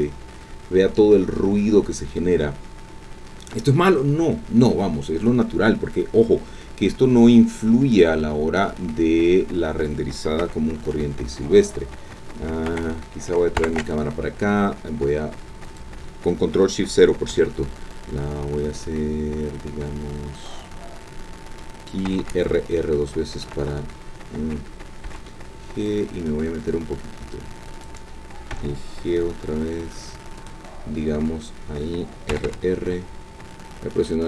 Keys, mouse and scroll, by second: 7.9 click, 10.4 KP_0, 12.7 KP_0, 13.6 ctrl+alt+KP_0, 15.7 click, 17.3 g, 21.5 click, 22.1 r, 23.5 Escape, 25.0 g, 25.2 click, 27.7 click, 28.5 g, 30.4 click, 32.3 r.